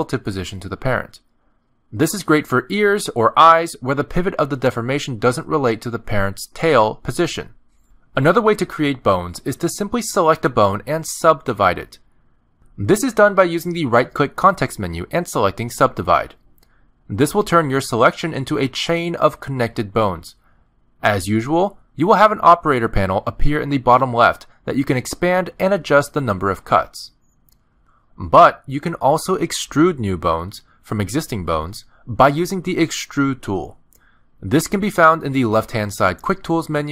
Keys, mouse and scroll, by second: 0.8 click, 1.6 click, 2.1 click, 2.8 r, 6.0 Tab, 6.8 click, 7.2 g, 8.0 click, 9.3 shift+middle click, 10.4 click, 11.4 click, 13.5 middle click, 13.5 shift+middle click, 14.5 right click, 20.4 middle click, 22.8 click, 25.6 click, 26.4 click, 26.6 click, 28.0 click, 28.2 click, 29.9 middle click, 30.7 a, 31.6 shift+middle click, 32.6 click, 33.1 middle click, 34.3 e, 36.3 middle click.